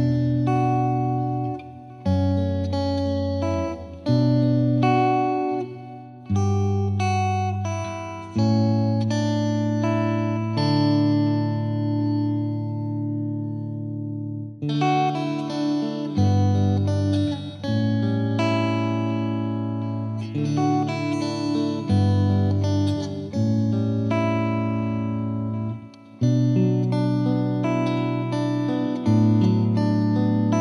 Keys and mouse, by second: 0.3 shift+click, 0.4 Page_Down, 0.9 click, 1.5 click, 1.6 F3, 1.8 F2, 2.0 click, 2.9 click, 3.6 click, 4.6 click, 5.6 click, 6.0 click, 6.4 click, 7.0 click, 8.6 click, 9.4 click, 9.7 click, 9.9 F3, 10.1 F2, 10.2 typing, 10.5 click, 10.9 click, 11.2 click, 12.3 click, 12.9 click, 13.0 click, 14.0 click, 14.1 click, 14.5 click, 14.5 click, 15.3 click, 15.4 click, 15.7 click, 15.8 click, 16.3 click, 16.4 click, 16.9 click, 17.4 click, 17.7 click, 18.2 click, 18.7 click, 19.9 click, 20.4 F2, 20.6 click, 21.2 click, 21.7 click, 22.3 click, 22.6 click, 23.0 click, 23.4-25.1 drag, 25.3 click, 25.7 click, 26.2 click, 27.0 click, 27.3 click, 27.8 click, 29.2 click, 29.9 click, 30.3 click.